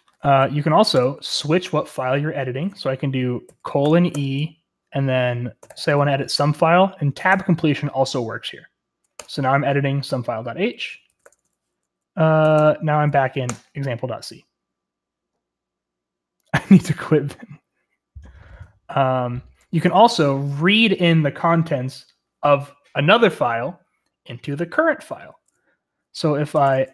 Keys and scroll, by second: 0.9 Return, 3.1-6.2 typing, 7.2 Tab, 9.1 Return, 10.8-12.3 typing, 13.4 typing, 26.3-26.9 typing.